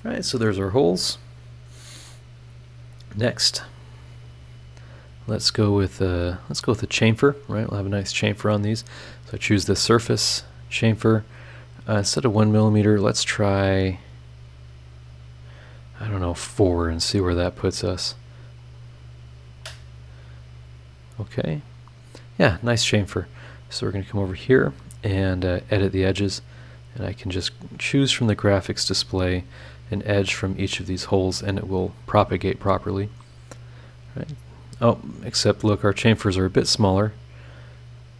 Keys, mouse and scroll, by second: 0.4 middle click, 1.3 click, 2.2 scroll down 2, 2.7 scroll up 1, 4.3 click, 7.8 click, 10.2 click, 12.7-18.0 drag, 18.6 click, 19.4 click, 21.0 click, 21.8 scroll up 1, 22.6 scroll down 1, 23.6 right click, 25.4 click, 26.9 click, 28.1 click, 29.3 click, 30.8 click, 33.0 click, 33.9 scroll down 2, 34.5 scroll up 2, 37.9 click.